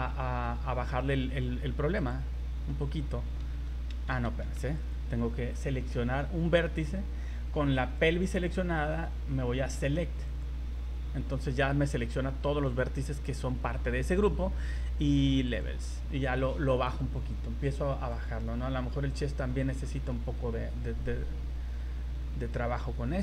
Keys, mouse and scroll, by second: 2.0 click, 4.4 ctrl+z, 4.8 right click, 7.8 click, 10.3 click, 15.5 click, 18.1 click, 19.8 middle click.